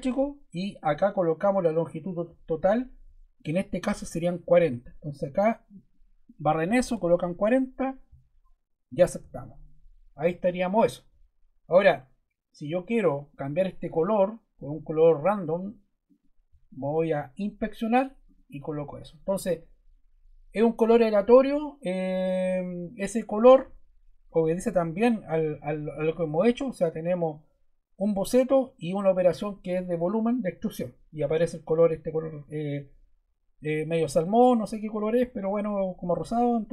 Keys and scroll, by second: 6.6 4, 7.0 0.